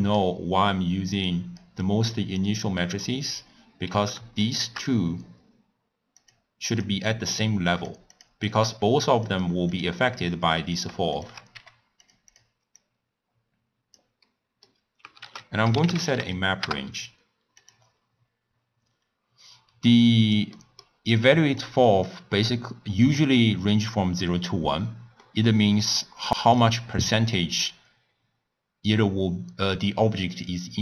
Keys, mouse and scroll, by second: 0.2 click, 1.2 click, 2.9 middle click, 3.3-4.0 scroll up 1, 4.0 click, 4.5 shift+click, 6.3 click, 6.8 click, 7.8 click, 8.2 drag, 8.5 click, 9.8 click, 10.8 click, 11.3 shift+drag, 11.6 g, 12.4 click, 12.8 click, 14.3 middle click, 15.3 ctrl+a, 20.1 click, 20.7-21.3 middle drag, 21.3-25.2 drag, 25.3-26.5 middle drag, 26.5 click.